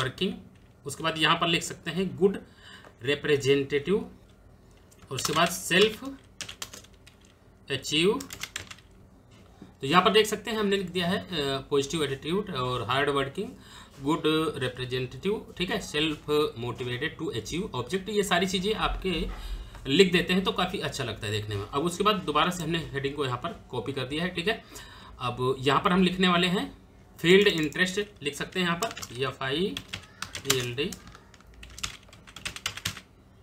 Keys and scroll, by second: 0.5 space, 0.7 Tab, 4.2 Tab, 4.6-6.3 typing, 8.0 shift+a, 8.3 c, 28.6-32.8 typing.